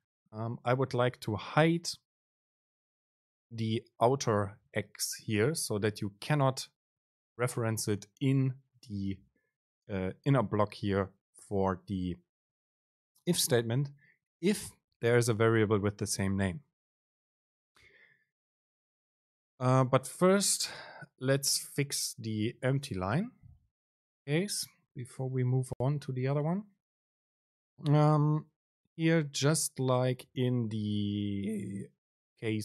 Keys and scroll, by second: 7.7 super+space, 21.9 super+space.